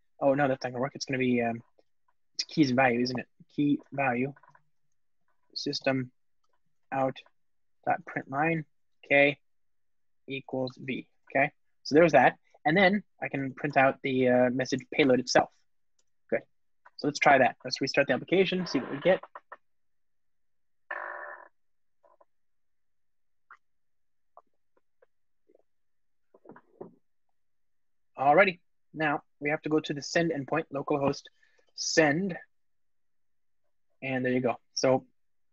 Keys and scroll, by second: 0.1 alt+shift+Left, 1.7 super+p, 6.5 Return, 11.1 alt+super+l, 13.5 Return, 16.7 alt+super+l, 17.6 ctrl+r.